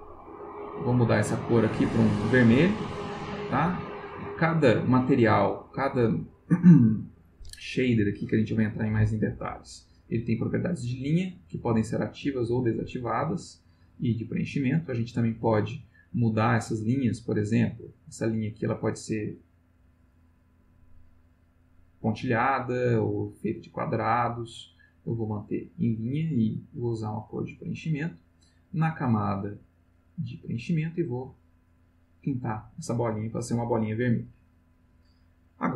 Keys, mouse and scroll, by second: 0.8 click, 1.7-2.7 drag, 11.8 click, 12.4 click, 17.0 click, 17.7-19.1 drag, 20.1 click, 21.4 click, 23.2 click, 24.8-25.7 drag, 26.6 click, 28.7 click, 29.8 click, 30.3 click, 31.4 click.